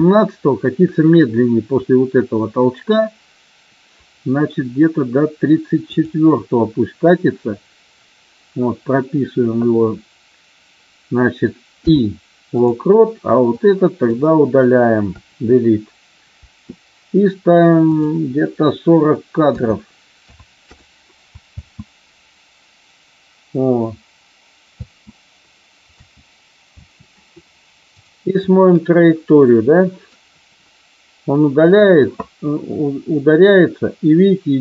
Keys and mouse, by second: 5.9 click, 13.4-14.2 drag, 15.1 Delete, 17.8-20.9 drag, 21.4 space, 24.8 space, 25.9 space, 26.7 space, 27.8 click, 28.4-31.8 drag.